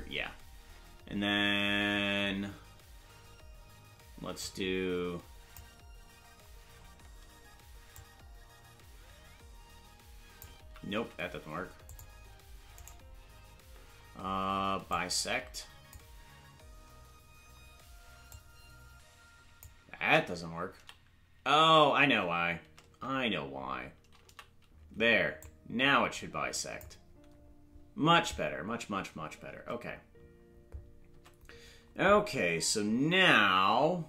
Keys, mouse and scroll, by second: 4.4-5.6 drag, 7.9-10.4 drag, 10.6 ctrl+z, 11.9 click, 12.8 right click, 14.9-15.9 drag, 18.3-19.6 drag, 20.0 ctrl+z, 20.7 a, 21.8 ctrl+z, 24.3 a, 25.4-26.8 drag, 29.6 Tab, 31.1 Tab.